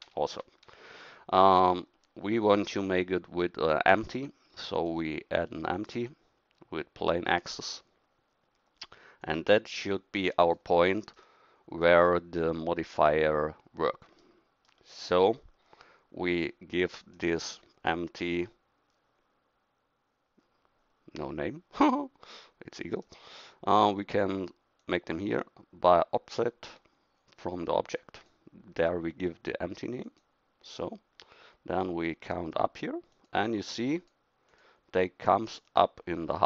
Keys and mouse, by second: 12.9-15.5 right drag, 17.1 right click, 22.9-36.4 right drag.